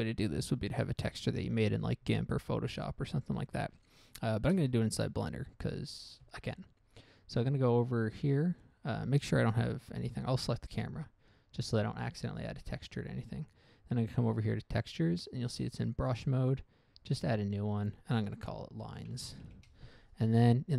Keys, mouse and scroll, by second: 0.2 click, 0.2 middle click, 0.5 middle click, 4.9 shift+space, 5.5-5.8 scroll down 1, 5.8 middle click, 6.1 middle click, 6.4 middle click, 6.6 middle click, 10.1 a, 10.8 right click, 14.4 click, 16.4 click, 16.7 click, 16.8 click, 18.1 click, 19.1-19.8 typing, 19.9 Return.